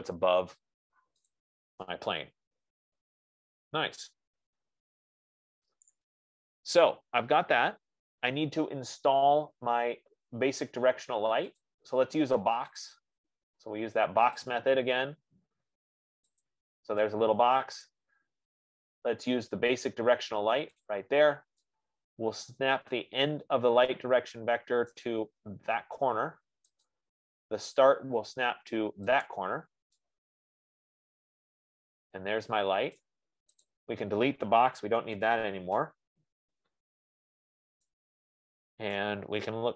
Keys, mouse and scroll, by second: 0.1 middle click, 1.4 F15, 1.6 middle click, 6.1 right click, 6.6-6.9 scroll, 7.3-7.8 scroll, 11.9 click, 13.1 click, 15.0 click, 18.4 right click, 21.2 click, 25.2 right click, 27.4 right click, 29.8 right click, 29.8 click, 33.4 right click, 34.1 click, 37.7 scroll, 37.7 BackSpace, 39.2 BackSpace, 39.4 right click.